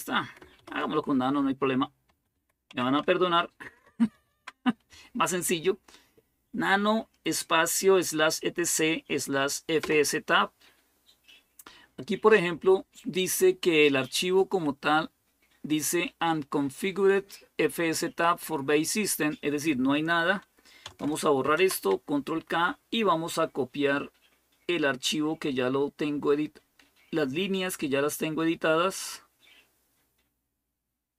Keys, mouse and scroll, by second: 0.2-4.4 typing, 9.6 Return, 12.3 Right, 13.0-14.3 Right, 14.6 Right, 21.3 ctrl+k, 28.9-31.1 drag.